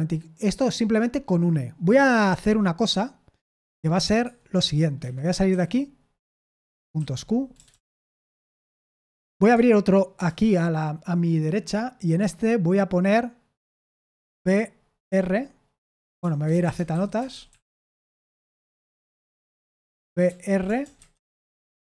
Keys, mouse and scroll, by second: 4.2 Escape, 4.9 Escape, 5.4 q, 6.9-8.7 typing, 10.1 super+Return, 14.1 b, 14.9 r, 16.1-17.9 typing, 19.0 Return, 19.6-21.3 typing, 21.6 Return.